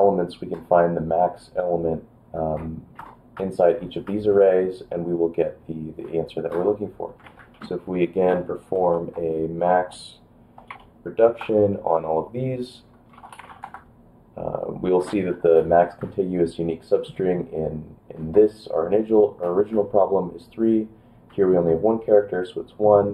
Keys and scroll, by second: 7.3 ctrl+p, 7.4 ctrl+a, 7.5 ctrl+f, 7.9 ctrl+f, 8.9 shift+b, 10.7 5, 11.4 Return, 12.7-14.0 typing.